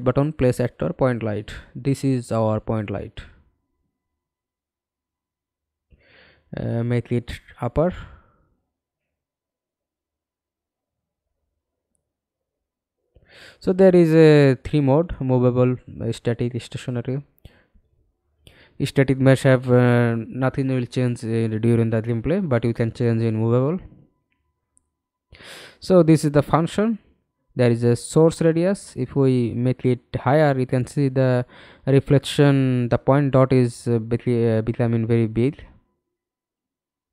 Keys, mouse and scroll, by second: 1.2 f, 1.8 alt+click, 2.9-3.2 scroll down 1, 7.0 w, 8.5 f, 9.2 alt+click, 10.5 alt+F9, 16.2-17.1 scroll down 2, 17.1-17.7 scroll down 1, 19.0-20.5 scroll down 1, 20.5-22.3 scroll up 4, 22.3-22.8 scroll up 1, 22.8 middle click, 32.7-37.1 scroll down 25.